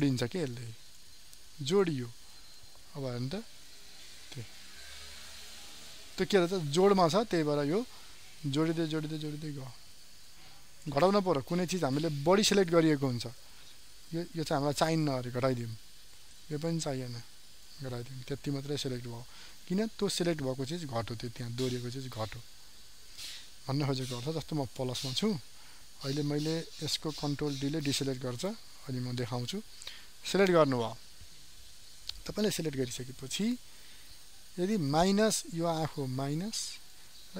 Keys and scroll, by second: 6.1 ctrl+z, 27.5 ctrl+d.